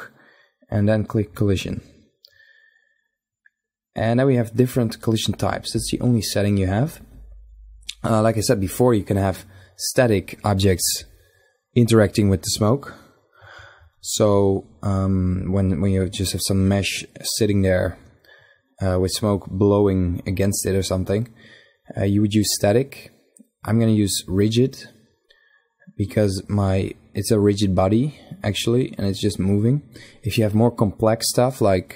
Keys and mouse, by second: 4.1-6.8 drag, 20.3-22.8 middle drag, 22.8-24.7 drag, 25.9-28.1 middle drag.